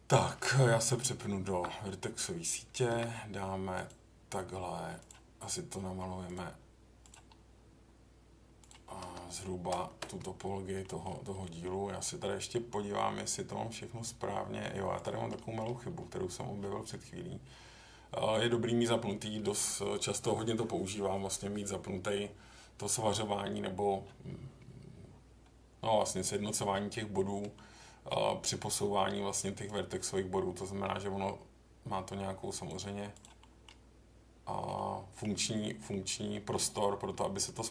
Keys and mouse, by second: 0.7 Tab, 2.9 k, 10.8 middle click, 11.4 middle click, 15.4 middle click, 27.5 middle click, 33.4 middle click, 34.7 middle click, 35.9 middle click.